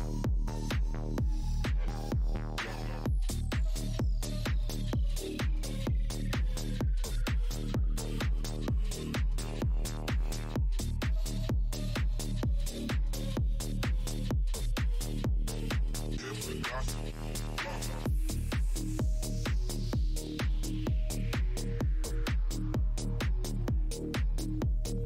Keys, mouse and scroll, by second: 0.0 Tab, 1.3 click, 1.5 Tab, 2.7 click, 3.6 alt+click, 4.0 Tab, 4.1 click, 5.7 ctrl+Tab, 7.0 click, 9.3 click, 10.2 super+Tab, 11.4 click, 11.4 Tab, 12.6 click, 12.7 Tab, 13.1 click, 13.6 click, 15.5 click.